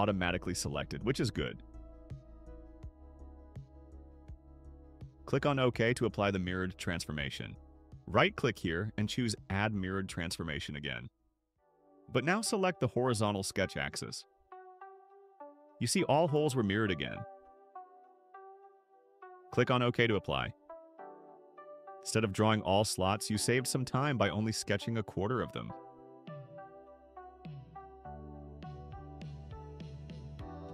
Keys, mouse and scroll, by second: 5.9 click, 7.9 right click, 10.1 click, 12.3 click, 14.5 click, 16.6-18.6 drag, 20.7 click, 22.4 scroll up 1, 22.8-30.7 drag.